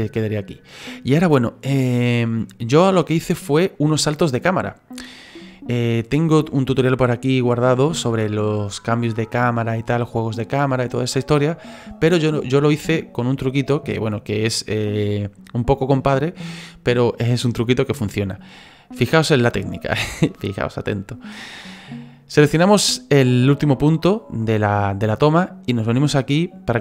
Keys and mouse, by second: 26.0 click.